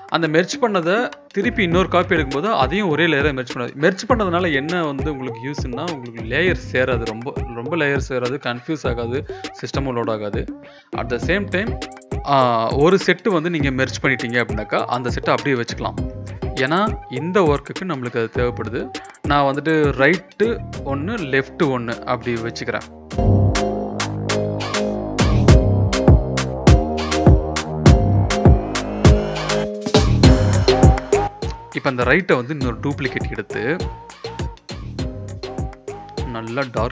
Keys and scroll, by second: 3.5 Delete, 4.3 Delete, 6.8 ctrl+e, 7.3 ctrl+z, 8.4 ctrl+z, 9.3 ctrl+z, 10.5 ctrl+t, 14.1-15.1 typing, 15.6 ctrl+z, 22.0 ctrl+z, 25.4-27.1 typing, 28.2-29.4 typing, 36.0 ctrl+l.